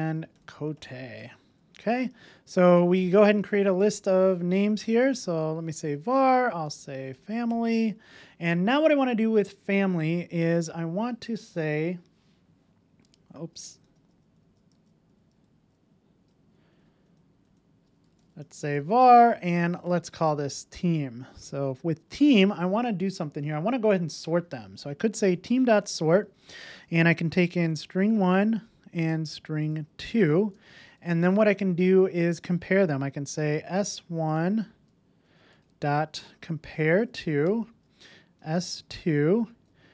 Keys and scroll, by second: 5.7 Return, 13.9 super+z, 19.0 Return, 25.8 Return, 37.4 Return.